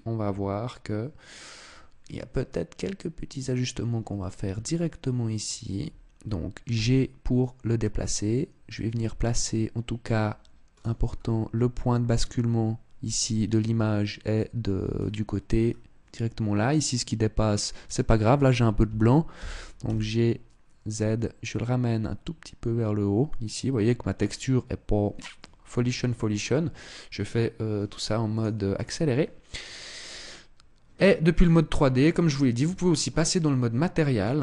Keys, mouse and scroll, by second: 29.7 click, 31.0 click, 32.4 Tab, 33.0 middle click, 34.3 middle click.